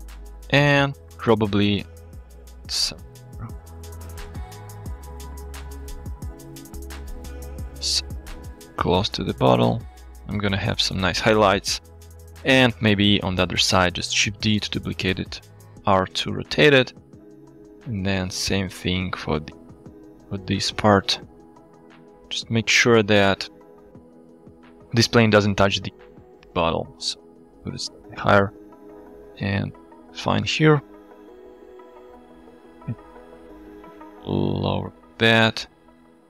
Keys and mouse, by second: 0.3-0.8 middle drag, 1.3 KP_7, 2.5 g, 6.3-6.7 middle drag, 6.9 middle drag, 7.6 g, 7.6 z, 12.1 middle drag, 12.9 KP_7, 14.2 shift+d, 15.0 r, 15.3 z, 17.6 g, 21.0-21.4 drag, 21.9 shift+middle drag, 22.2 middle drag, 22.5-23.1 middle drag, 23.3-23.8 drag, 26.3 g, 26.5 z, 28.0 click, 28.6 shift+click, 29.8-30.1 middle drag, 30.1 click, 30.3 click, 30.5-31.0 drag, 31.7 click, 32.8 g, 32.9 z, 35.2 click, 35.6 click.